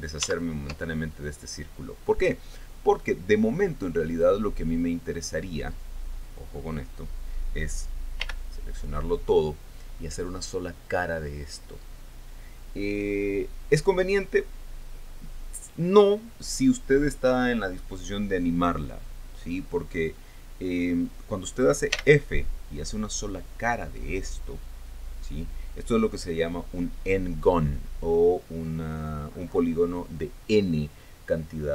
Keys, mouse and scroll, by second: 4.8 right click, 8.8 l, 22.5 f.